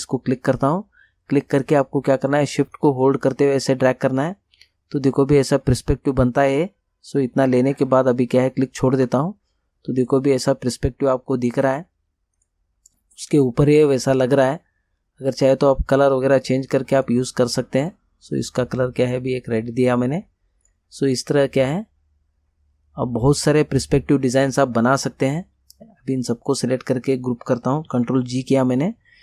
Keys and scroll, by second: 27.9 ctrl+g.